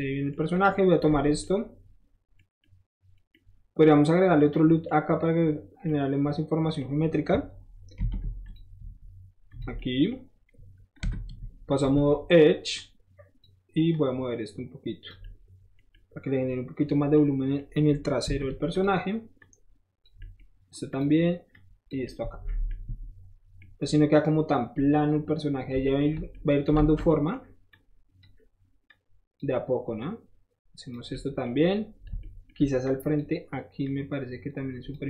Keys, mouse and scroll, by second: 0.3 middle drag, 0.5 click, 0.6 scroll up 1, 0.9 middle click, 1.0 middle click, 1.2 Tab, 3.2 middle click, 8.0 ctrl+r, 8.4 click, 9.5 click, 9.8-10.1 middle drag, 10.6 middle click, 11.1 2, 11.7 click, 11.9-12.4 middle drag, 12.8 click, 13.9-15.1 drag, 15.2-15.8 middle drag, 15.8 scroll down 1, 15.9-16.8 middle drag, 17.1-17.6 middle drag, 17.9 scroll up 1, 18.7 click, 19.4 click, 20.9 click, 21.5 click, 23.8 middle click, 24.5 scroll down 1, 26.2 shift+middle click, 26.8 alt+shift+z, 27.7 click, 28.9 click, 30.0 click, 31.1 middle click, 32.2 shift+middle click, 32.8 shift+click, 33.8-35.0 shift+drag.